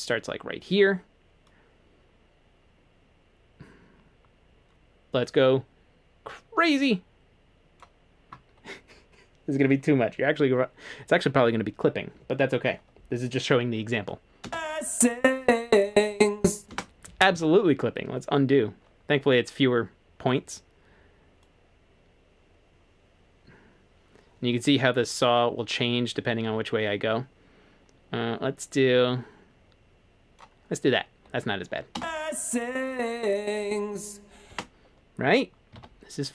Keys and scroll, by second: 14.5 space, 16.7 space, 17.4 super+z, 35.8 super+z.